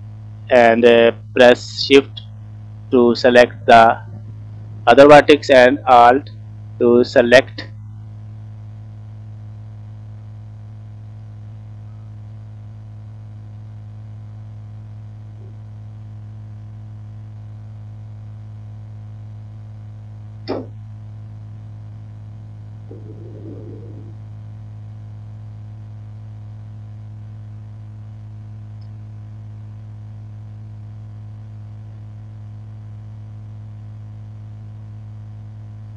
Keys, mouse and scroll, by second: 3.9 shift+click, 6.5 alt+shift+click, 8.2 alt+shift+click, 9.1 click, 12.0 alt+click, 14.7 shift+click, 20.4-20.8 scroll down 2, 20.9 middle click, 22.0 scroll up 1, 25.6 alt+shift+click, 26.7 click, 27.1 middle click, 27.5 scroll up 2, 27.9-28.2 scroll down 2, 28.4 shift+middle click, 28.9 middle click, 29.5 scroll up 2, 30.2 scroll down 1, 30.6 middle click, 31.5 click, 33.3 alt+click, 34.6 click, 34.9-35.7 scroll up 1.